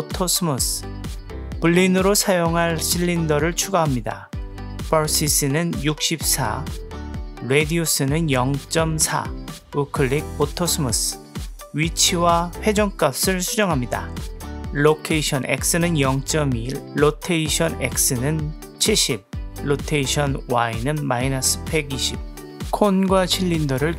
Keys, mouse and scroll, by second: 1.5 shift+a, 7.5-9.1 drag, 9.9 right click, 11.9 click, 12.7 n, 15.4-16.5 drag, 17.9-19.1 drag, 20.1-21.3 drag.